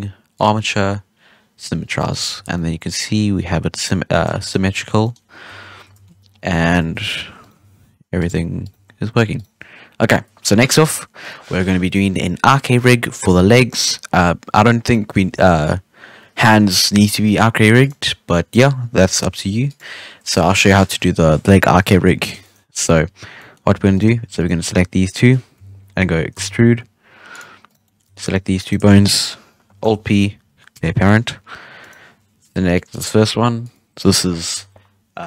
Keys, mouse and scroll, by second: 0.3-1.8 drag, 1.8 scroll down 1, 1.9-2.3 middle drag, 2.3 alt+a, 2.5-3.8 middle drag, 3.8 scroll up 1, 4.1 scroll down 2, 4.3-4.7 shift+middle drag, 4.7 Tab, 4.8 scroll down 1, 5.0-5.4 middle drag, 5.4 Tab, 6.2 scroll up 1, 6.4-6.8 middle drag, 6.8 ctrl+Tab, 7.4 right click, 7.5 r, 8.6 right click, 8.7 r, 14.5-14.9 scroll down 4, 14.9-15.3 middle drag, 15.3-18.4 scroll up 6, 20.1-20.9 scroll down 1, 20.9-21.7 scroll down 1, 21.7 KP_3, 21.9 alt+a, 22.4 shift+middle drag, 22.5 scroll up 1, 22.8 Tab, 23.3-23.9 middle drag, 23.9 right click, 24.3 shift+right click, 25.5 KP_3, 26.3 e, 27.6 right click, 27.8-28.2 middle drag, 28.2 shift+right click, 28.6 shift+right click, 29.8 alt+p, 31.8 right click, 33.6-35.2 drag.